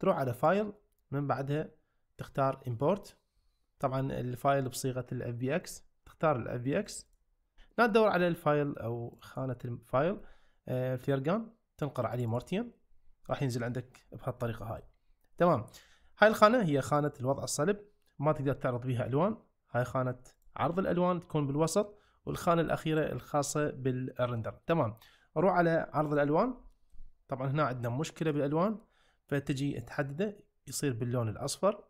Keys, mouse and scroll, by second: 0.5-7.2 drag, 13.7 shift+middle drag, 14.6 shift+middle click, 23.9 click, 26.1 click, 26.7 shift+middle click, 27.8 click.